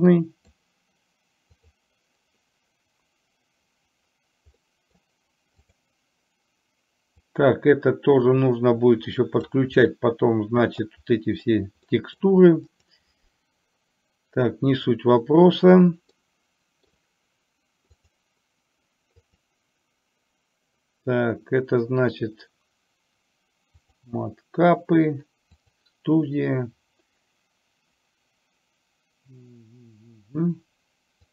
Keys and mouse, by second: 4.7 middle click, 5.8 click, 7.4-9.6 drag, 9.8-10.9 middle drag, 11.9 middle click, 12.8 click, 16.2 middle click, 18.2-31.3 drag.